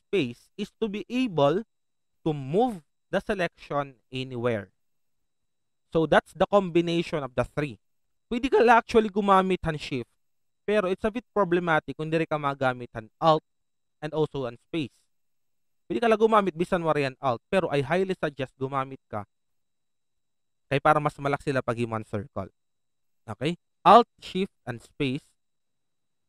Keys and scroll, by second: 0.2 alt+space, 16.2 shift+space, 19.3 shift+space, 24.6 typing.